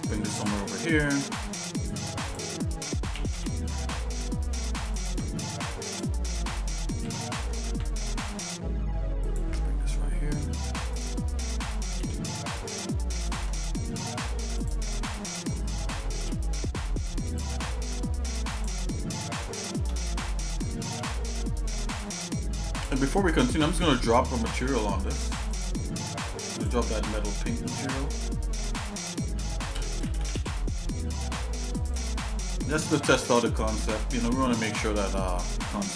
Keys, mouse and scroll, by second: 1.3 click, 3.3 g, 5.4 middle click, 5.9 click, 7.0 g, 9.7 middle click, 10.9 click, 12.0 g, 13.6 middle click, 14.6 click, 16.2 g, 17.7 middle click, 18.5 click, 19.5 shift+middle click, 20.8 g, 23.2-23.7 scroll down 3, 23.7 Tab, 25.5 click, 26.7-32.1 drag, 32.9 shift+middle click, 33.6 middle click.